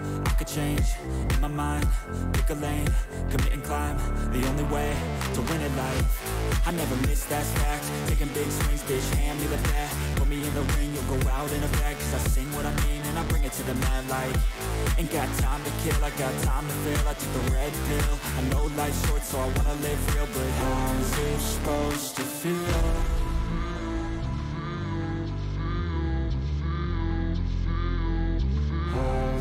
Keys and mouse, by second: 1.2 click, 1.8 click, 3.2 click, 4.3 click, 5.0 click, 5.7 click, 6.9 click, 8.4 click, 9.4 alt+click, 9.7 alt+shift+click, 10.2 alt+shift+click, 13.2-14.3 drag, 15.8-16.9 drag, 17.7 click, 19.2 alt+shift+click, 19.5 alt+shift+click, 19.8 shift+click, 20.6 ctrl+shift+click, 22.6-23.7 drag, 25.3 click, 26.9 click, 29.0 ctrl+shift+click.